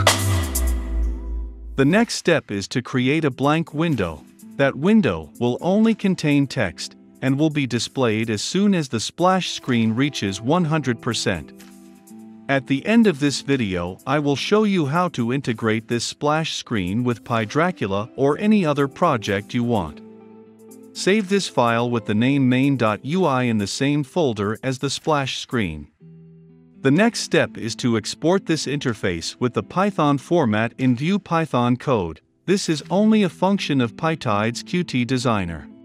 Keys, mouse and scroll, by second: 6.9 click, 7.6 right click, 8.1 click, 8.7 right click, 9.1 click, 9.2 right click, 10.1 ctrl+c, 10.1 click, 10.1 ctrl+v, 10.2 click, 10.4 right click, 10.6-11.7 drag, 11.7 right click, 11.9 click, 12.0 right click, 12.7 click, 12.8 scroll, 13.5 click, 13.6 right click, 13.8 click, 14.5 right click, 14.7 click, 15.0-15.8 typing, 16.1-17.7 drag, 18.1 ctrl+s, 19.0-21.8 typing, 22.4-24.9 right drag, 26.7 right click, 26.7 s, 28.2 click.